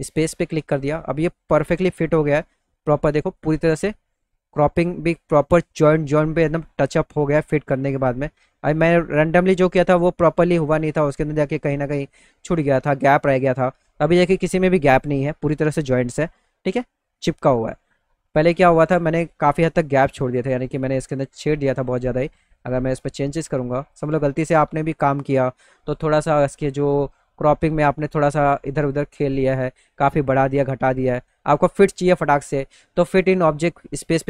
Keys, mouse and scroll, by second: 3.9-5.2 alt+middle drag, 13.9-15.3 alt+middle drag, 15.7 scroll up 2, 19.2 click, 22.2-24.0 drag, 24.7 click, 27.8 click, 29.5 click, 33.7 click.